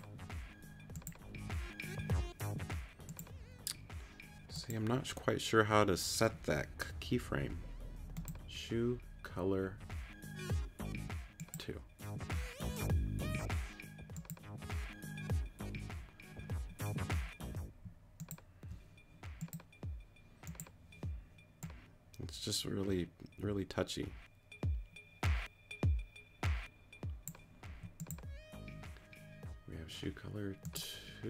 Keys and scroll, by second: 16.7 q, 17.8 q, 27.7 q.